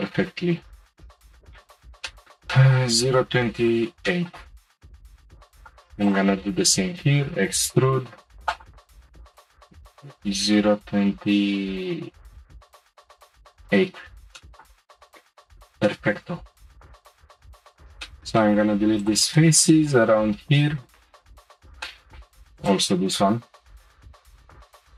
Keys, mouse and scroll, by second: 1.6-2.1 scroll down 1, 2.1-4.6 shift+middle drag, 4.6-5.1 scroll up 2, 5.1 click, 5.6 shift+click, 6.0 shift+click, 7.0 e, 8.9 shift+middle click, 14.3 shift+middle click, 15.0-15.5 scroll up 1, 15.5 3, 15.8 middle click, 16.7-17.3 scroll up 4, 17.3 click, 18.0 shift+middle click, 18.9 shift+click, 19.4 middle click, 20.3 scroll down 1, 20.6-21.7 shift+middle drag, 21.7 Delete, 21.8 middle click, 22.6 click, 23.4 Delete.